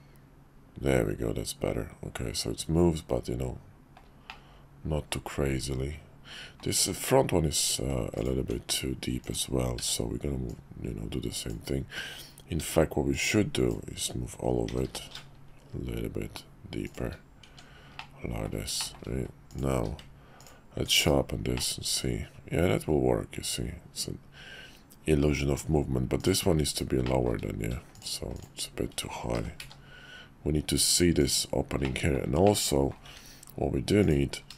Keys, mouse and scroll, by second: 4.3-6.6 middle drag, 8.4 Tab, 9.2 click, 9.8 b, 12.6 b, 14.7 g, 17.4 Tab, 17.9-18.5 middle drag, 18.8 shift+middle drag, 19.7 q, 21.0 /, 21.5-25.5 middle drag, 27.0 shift+middle drag, 28.3 shift+click, 29.3 g, 31.9 middle click, 32.4 middle click, 34.0 click.